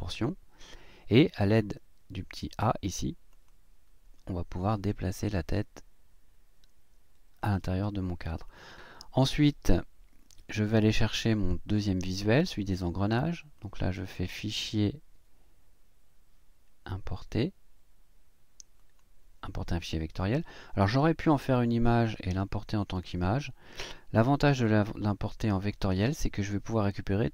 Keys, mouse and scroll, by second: 3.3 click, 4.7-7.6 drag, 8.5 click, 13.6 click, 18.8 click, 21.5 click, 22.8 click, 24.4 click, 25.6 click.